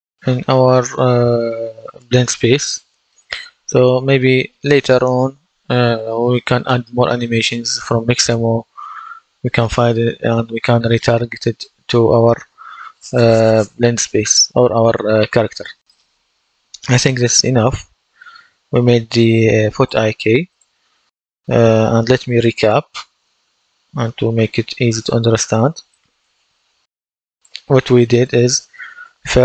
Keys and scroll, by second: 2.4 Escape, 3.9 F11.